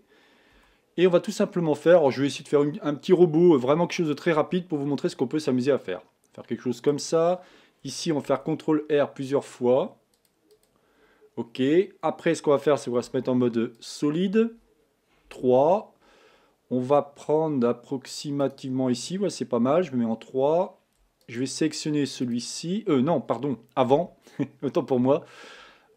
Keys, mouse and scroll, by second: 0.6 b, 3.6 g, 8.3 ctrl+r, 13.0 z, 15.2 KP_3, 18.4 click, 19.7 3, 21.2 shift+click, 21.7 shift+click, 22.2 shift+click, 23.9 KP_1, 25.0 a.